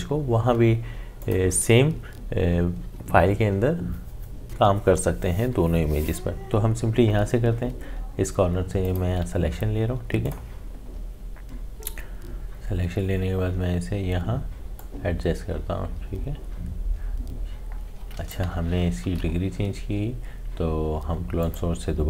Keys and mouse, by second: 1.2 click, 7.7 click, 14.8-19.0 drag, 19.0 ctrl+z, 21.4 click.